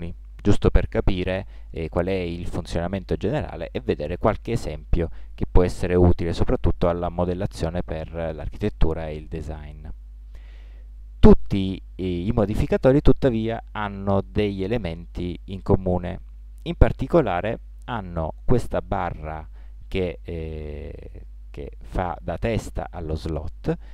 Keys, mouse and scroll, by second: 7.4-9.9 middle drag.